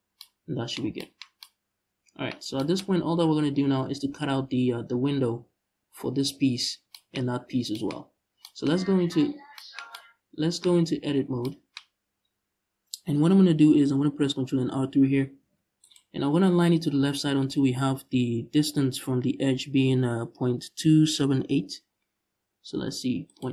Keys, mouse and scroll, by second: 2.6-4.9 scroll up 2, 4.9-6.3 scroll up 1, 6.3-6.6 scroll down 1, 7.6 scroll up 1, 8.4 Tab, 10.6 ctrl+s, 15.1 ctrl+r, 15.1-23.0 drag.